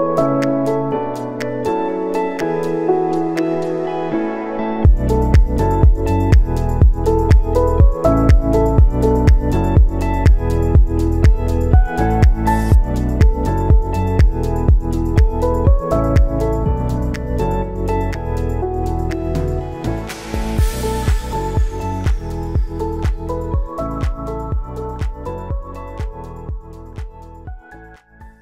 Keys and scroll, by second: 7.2 ctrl+s, 11.9 space, 16.0 space, 16.3 ctrl+s, 20.9 ctrl+s, 22.0 space.